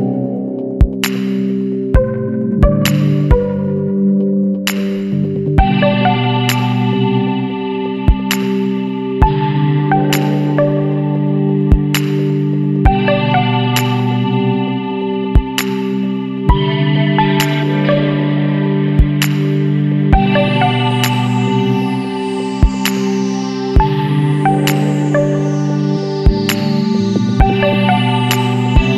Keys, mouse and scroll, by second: 0.0 click, 4.0 click, 5.4 click, 7.4 KP_5, 7.8 KP_0, 10.1 click, 15.9 ctrl+click, 17.6 ctrl+click, 19.3 ctrl+click, 21.0 click, 22.9 BackSpace, 23.6 KP_0, 24.0 KP_Decimal, 24.1 KP_5, 26.1 click.